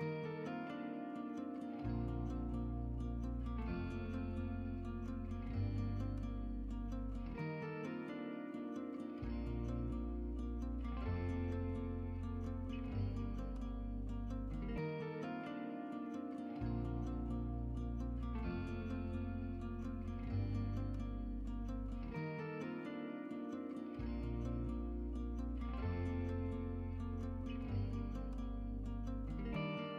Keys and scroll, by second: 1.1-2.3 typing, 18.4-19.1 typing, 25.7 Tab, 26.2 Tab.